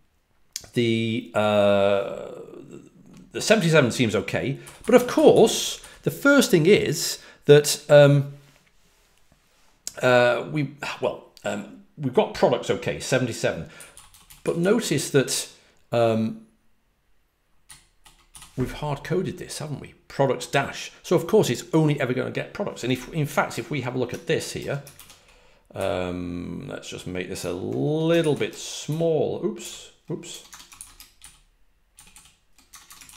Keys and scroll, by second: 4.3-6.2 typing, 13.7-14.5 typing, 17.6 typing, 29.3-30.4 typing, 32.0-33.1 typing.